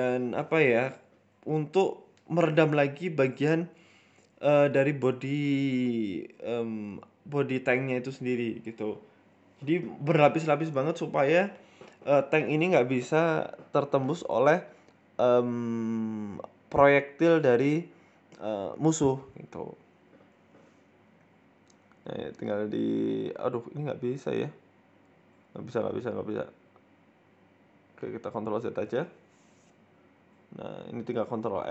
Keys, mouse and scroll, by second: 7.1 ctrl+t, 7.1 ctrl+z, 7.8 click, 9.1 g, 9.3 shift+middle click, 9.9 click, 11.8 ctrl+t, 15.7 click, 17.3-18.0 scroll up 2, 17.3 e, 18.0 click, 18.4 right click, 18.8 shift+right click, 19.4 Delete, 20.3 middle click, 20.7 scroll up 1, 20.9 shift+middle click, 21.2 middle click, 21.5 ctrl+z, 21.7 middle click, 22.2 shift+middle click, 23.6 Delete, 24.8 right click, 25.3 middle click, 25.9 middle click, 26.8 ctrl+z, 27.0 ctrl+z, 27.2 ctrl+z, 27.4 ctrl+z, 27.6 ctrl+z, 27.9 ctrl+z, 28.3 middle click, 28.9 ctrl+r, 30.2 KP_4, 30.7 KP_1, 31.2 ctrl+r.